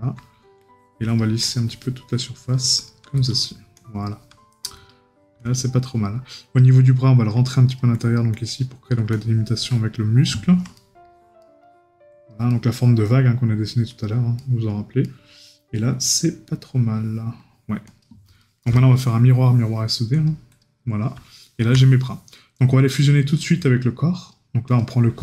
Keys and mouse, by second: 10.7 right click, 14.4 right click, 18.4 right click, 21.4 right click.